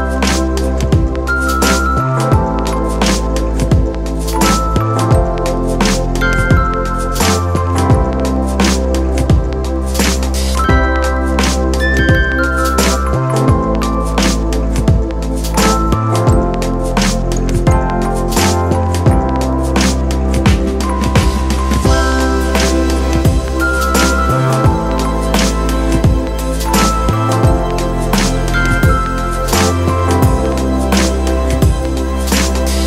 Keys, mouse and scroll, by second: 17.2 [, 23.4 [, 26.1 ].